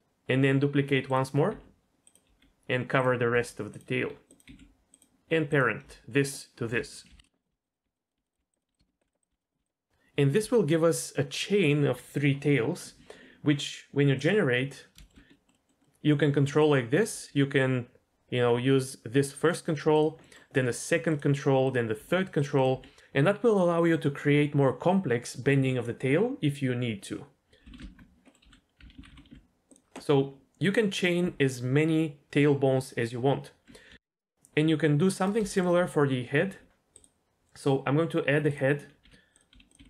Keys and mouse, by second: 1.0 click, 1.5 g, 2.2 r, 3.3 s, 3.9 r, 4.4 g, 5.5 click, 6.4 shift+click, 7.1 ctrl+p, 7.5-9.6 typing, 8.8 shift+click, 9.2 click, 14.2 click, 15.0 shift+middle click, 15.3 middle click, 15.5 middle click, 15.8-17.1 middle drag, 17.1 r, 19.5 click, 20.2 middle click, 20.5 r, 21.1-21.9 drag, 21.9 r, 22.7 r, 28.2 middle click, 28.4 a, 28.9 alt+r, 29.1 alt+g, 29.9 click, 33.9 KP_3, 34.1 shift+middle click, 35.5 shift+middle click, 39.0 g, 39.5 s, 39.8 g.